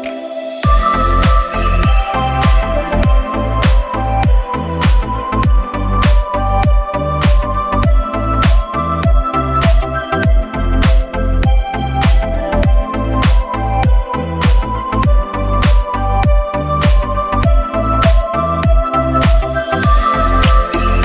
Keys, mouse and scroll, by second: 0.8-2.1 scroll up 5, 1.3 click, 4.9 middle click, 5.8-6.2 scroll up 2, 6.2-6.8 scroll down 6, 6.4 middle click, 7.0 middle click, 7.4 scroll up 1, 8.2 scroll up 4, 8.2 g, 12.1 alt+g, 13.0 g, 15.2 scroll down 1, 16.4 alt+g, 17.3 click, 17.7 scroll down 1, 19.3 scroll down 21, 20.7 click.